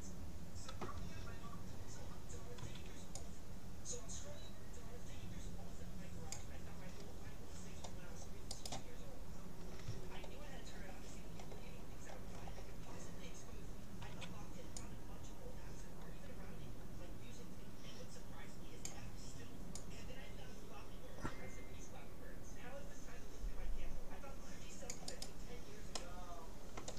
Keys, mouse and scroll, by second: 2.6 c, 9.1-14.4 middle drag, 14.2 c, 25.9-26.9 middle drag.